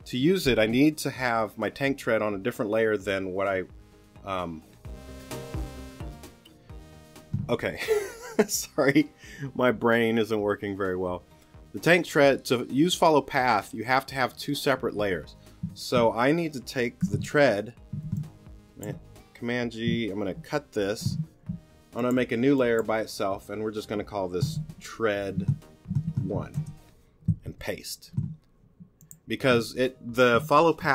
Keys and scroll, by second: 17.0 g, 20.4 super+x, 24.5 t, 27.3 super+Return.